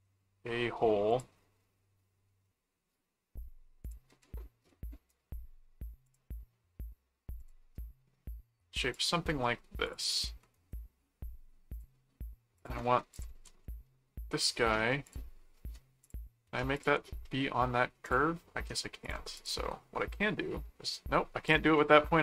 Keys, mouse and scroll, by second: 1.1 click, 3.8 click, 5.1 right click, 6.0 click, 7.4 click, 8.9 click, 9.8 click, 10.5 right click, 11.7 click, 12.6 click, 13.4 alt+c, 13.6 alt+middle click, 15.1 ctrl+click, 16.0 ctrl+click, 16.7 ctrl+click, 18.0 click, 19.0 ctrl+click, 21.5 click, 21.7 middle click.